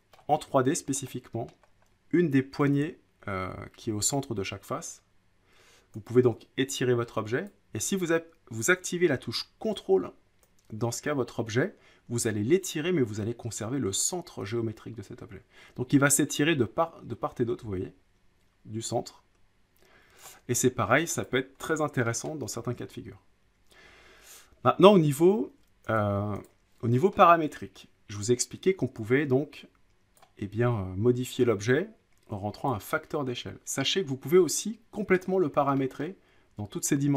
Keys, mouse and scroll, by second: 0.1-1.0 scroll, 0.2 middle click, 1.5 middle click, 1.6-2.5 scroll up 3, 7.4 click, 9.7 click, 20.2 ctrl+click, 20.5-21.0 scroll, 21.2 click, 21.5-22.0 scroll up 5, 22.3 middle click, 26.0 click, 26.5 click, 27.1 middle click, 30.1 click, 32.7-33.8 drag, 35.2-35.8 drag, 36.0 middle click.